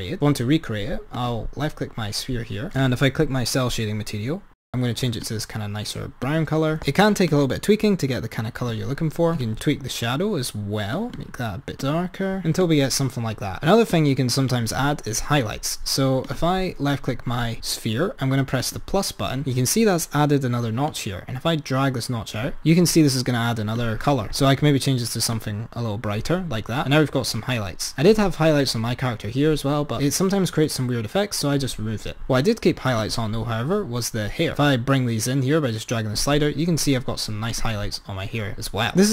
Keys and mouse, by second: 1.1-1.6 drag, 2.8 click, 9.4 click, 12.7 click, 14.0 click, 16.2 click, 18.6-22.6 drag, 23.7-24.4 drag, 27.0-27.4 drag, 30.6 click, 33.0-33.6 drag, 34.3 click, 37.6 click, 38.8-39.1 drag.